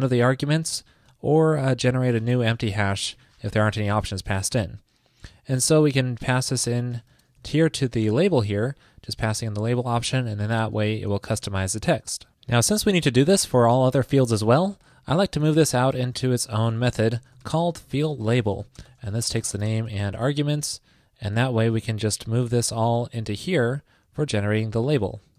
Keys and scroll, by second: 1.3 super+Right, 3.8 alt+Left, 6.4 alt+Right, 9.9 super+Right, 11.4 super+s, 22.1 super+v.